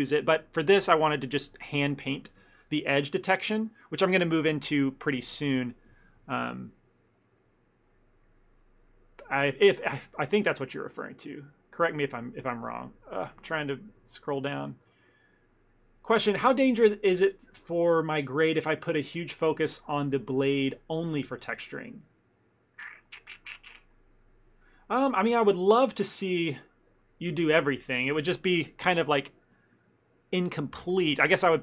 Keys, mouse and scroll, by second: 4.6 middle click, 5.2 middle click, 5.5 middle click, 6.1 ctrl+middle click, 6.2 ctrl+middle click.